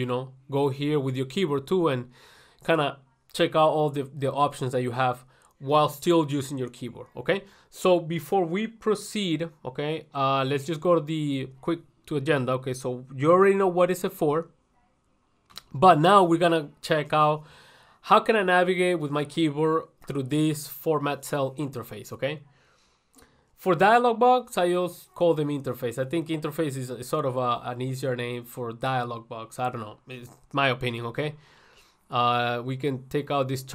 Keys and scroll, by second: 23.6 ctrl+1.